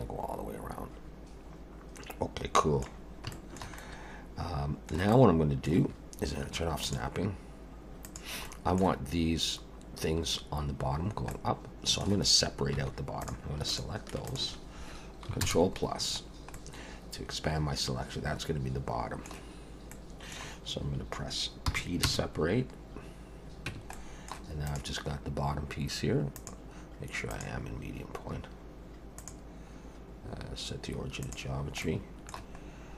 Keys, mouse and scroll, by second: 3.0-3.3 scroll down 2, 3.3 shift+middle click, 3.8 middle click, 5.1 middle click, 5.3 shift+middle click, 6.8 click, 8.0 click, 8.4 middle click, 11.3 middle click, 12.8 3, 13.2 click, 13.7 shift+click, 14.3 click, 15.4 ctrl+KP_Add, 16.3 scroll down 1, 16.6 middle click, 19.9 middle click, 21.7 p, 23.7 Tab, 23.9 middle click, 24.6 click, 26.3 click, 29.2 click, 31.8 middle click.